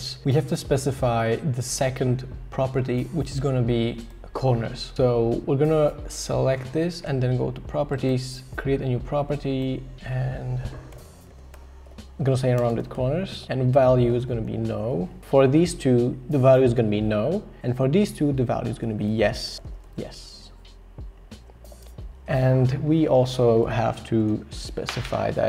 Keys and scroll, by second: 10.7-15.1 typing, 18.4-20.2 typing, 21.6-22.4 typing.